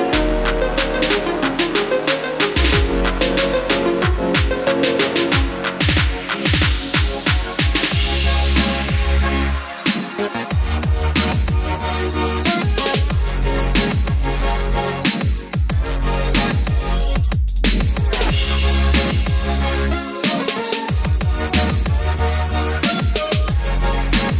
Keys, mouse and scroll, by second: 0.2 click, 1.0 F4, 5.6-22.3 drag.